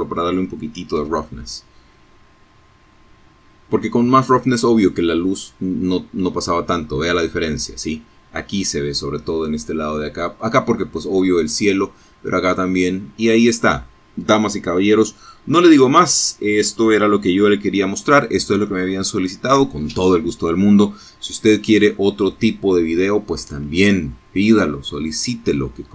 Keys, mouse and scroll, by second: 13.8 Escape, 15.5-16.0 scroll down 2, 16.8 shift+middle click.